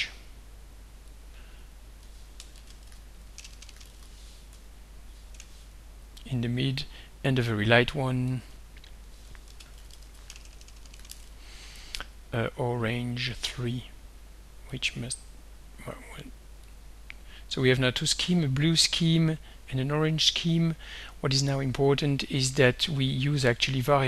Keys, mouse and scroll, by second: 1.1 click, 2.3-5.4 typing, 6.5 click, 8.3 click, 9.2-11.6 typing, 13.3 3, 14.7 click, 16.7 click.